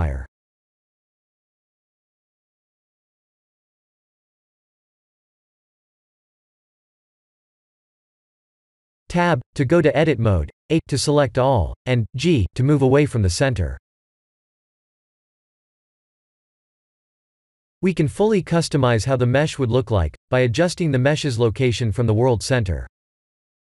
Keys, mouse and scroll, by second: 2.7 click, 3.5 KP_Enter, 5.2-6.6 scroll down 15, 6.6-7.8 scroll up 4, 7.8 click, 7.8-8.3 scroll up 1, 8.3 KP_7, 8.9 Tab, 9.8 g, 13.8 ctrl+alt+q, 14.7 g.